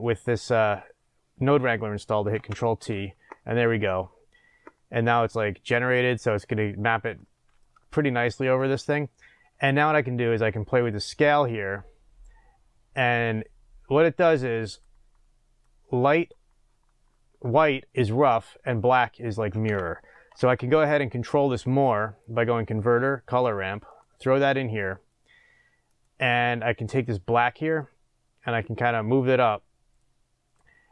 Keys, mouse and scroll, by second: 2.4 ctrl+t, 7.9-11.4 shift+middle drag, 8.6-10.1 scroll up 2, 10.1-11.4 scroll up 1, 11.4-15.8 drag, 23.9 shift+a, 24.1 click, 26.0 click.